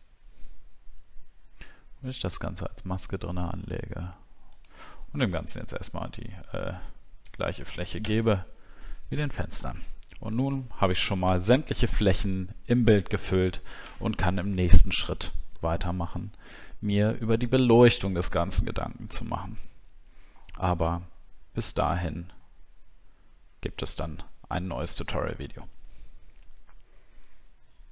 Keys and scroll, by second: 8.0 ctrl+BackSpace.